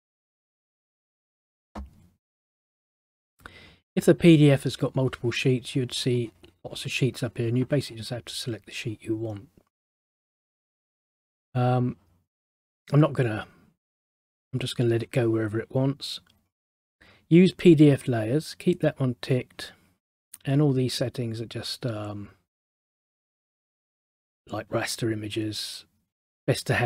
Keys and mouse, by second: 0.3 click, 0.5 click.